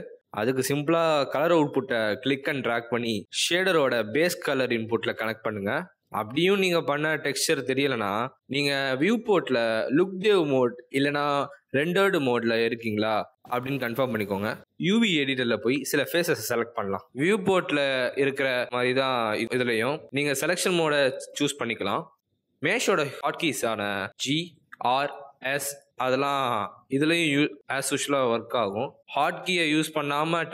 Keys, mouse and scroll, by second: 7.2 z, 15.4 click, 16.2 shift+click, 16.7 shift+click, 18.6 click, 19.5 click, 20.7 click, 21.4 click, 22.2 click, 22.9 click, 24.0 g, 25.5 s, 26.4 r, 28.0-28.6 scroll up 3, 29.5-30.5 scroll down 1.